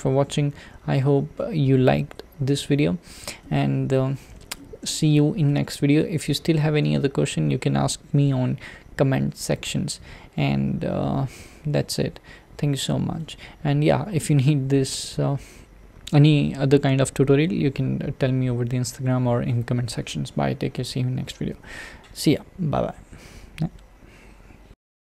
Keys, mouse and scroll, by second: 3.5-11.1 middle drag, 11.1-11.8 scroll up 1, 12.8-20.2 shift+middle drag.